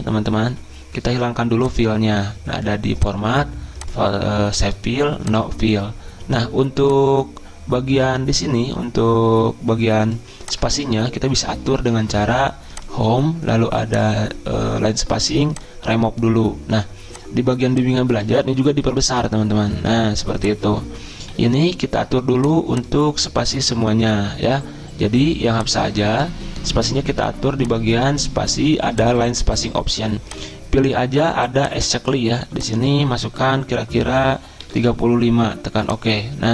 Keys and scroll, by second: 10.7 ctrl+a, 18.9 ctrl+], 19.0 ctrl+], 19.2 ctrl+], 19.5 ctrl+], 34.4-35.3 typing.